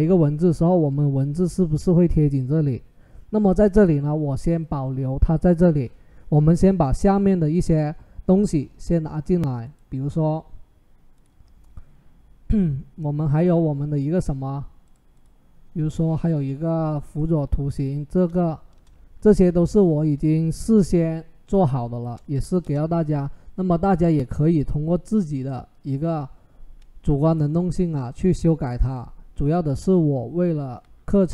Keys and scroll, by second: 18.5 Return, 19.5 ctrl+t, 22.4 Return.